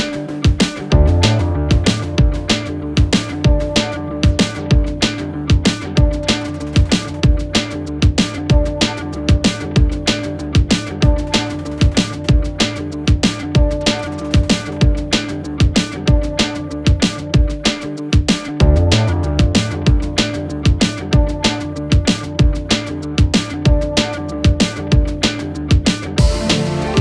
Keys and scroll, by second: 1.3 ], 2.9 4, 3.8 ctrl+F1, 4.0 1, 5.5 4, 16.7 ], 20.2 ], 21.6 ], 22.9 4, 23.4 2, 26.8 Delete.